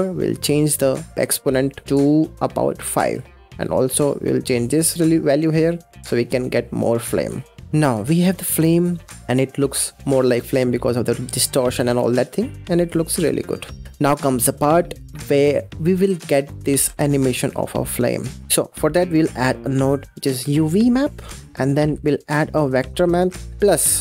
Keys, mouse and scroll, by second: 0.2-1.3 drag, 1.7-3.0 drag, 3.5-3.9 scroll up 8, 3.9-7.0 drag, 7.6-10.2 middle drag, 10.6-11.0 scroll up 5, 11.0 scroll down 4, 11.3-13.6 middle drag, 13.6 scroll down 2, 13.8-14.6 middle drag, 14.6-15.2 scroll down 3, 15.2-17.9 middle drag, 17.9-18.2 scroll up 4, 18.4 middle click, 18.5 shift+a.